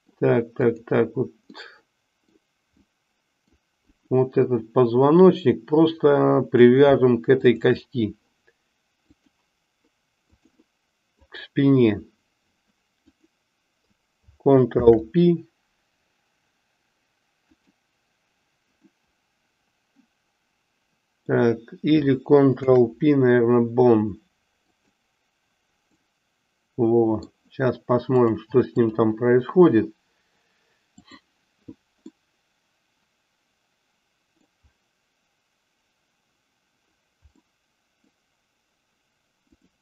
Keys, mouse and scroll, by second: 0.6 click, 1.4-2.4 middle drag, 3.0 middle click, 4.0 click, 5.4-6.8 middle drag, 7.3 shift+click, 9.1-10.4 drag, 11.2 click, 13.2 click, 14.7 ctrl+p, 19.0-21.4 middle drag, 22.6 ctrl+p, 26.0-27.3 middle drag, 28.1 click, 31.3 click, 32.2-34.6 middle drag, 37.4-38.1 middle drag, 39.6 click.